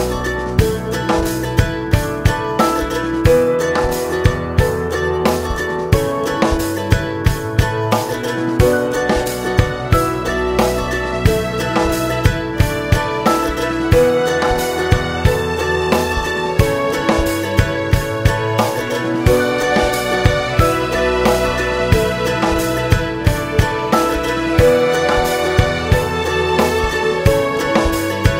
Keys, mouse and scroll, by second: 0.0 click, 0.4 3, 0.5 click, 0.8 shift+click, 1.0 `, 1.4 shift+click, 1.7 `, 2.2 shift+click, 2.8 i, 4.1 e, 6.2 `, 7.2 scroll up 1, 7.3 `, 7.8 alt+click, 8.3 2, 8.4 3, 8.6 alt+click, 9.1 2, 9.3 alt+click, 10.6 z, 10.7 alt+shift+click, 11.1 z, 11.3 alt+shift+click, 11.9 ctrl+e, 12.4 scroll down 1, 12.5 `, 12.9 scroll up 1, 13.6 click, 14.0 ctrl+e, 14.4 scroll down 1, 14.5 `, 15.4-15.8 scroll up 2, 15.8 `, 16.4 click, 17.3 `, 17.6 scroll down 1, 17.8 `, 18.1-18.5 scroll up 1, 18.5 shift+click, 18.8 alt+shift+click, 19.8 `, 20.4 ctrl+e, 20.8 scroll down 2, 21.0 `, 21.6-22.2 scroll up 3, 21.8 Tab, 22.2 alt+a, 22.4 Tab, 22.6 scroll down 2, 22.8 `, 23.3-23.6 scroll up 2, 23.6 `, 24.2 Tab, 24.4-24.8 scroll down 1, 24.8-25.2 scroll up 2, 25.2 click, 25.8 ctrl+e, 26.3 `, 27.0 scroll down 2, 27.0 `, 27.9 Tab, 28.0-28.3 scroll down 1.